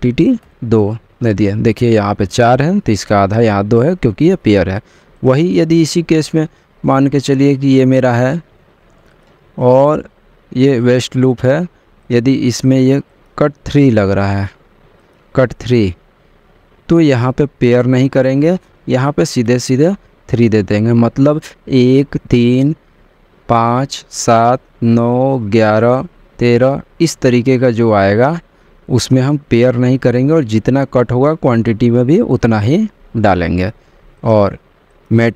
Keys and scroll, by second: 0.9 2.